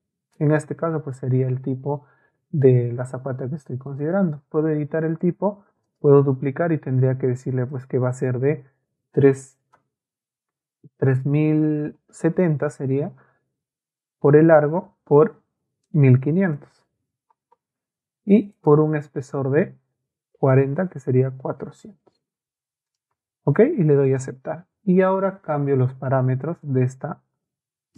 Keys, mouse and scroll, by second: 1.3 Escape, 3.9 middle click, 5.9 click, 7.4 click, 11.1 BackSpace, 12.1 KP_7, 15.8 click, 17.1 KP_5, 21.2 ], 22.1 BackSpace, 23.2 BackSpace, 24.1 click, 25.8 ctrl+a, 26.6-27.9 ctrl+drag.